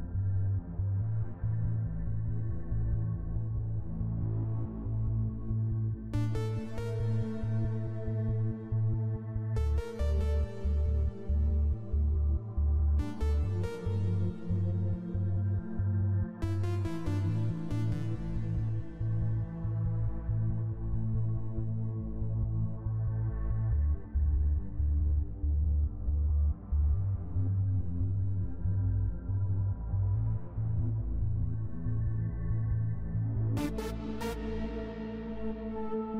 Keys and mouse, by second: 1.0 click, 1.6 click, 2.6 F12, 3.1 click, 4.4 click, 6.7 click, 7.9 click, 8.7 click, 10.1-11.5 drag, 11.7 click, 12.4 click, 12.9-15.3 drag, 16.0 click, 18.4 click, 19.4-20.8 drag, 23.3 click, 24.1 click, 26.8 click, 27.7 click, 28.4 click, 29.8 click, 31.2 click.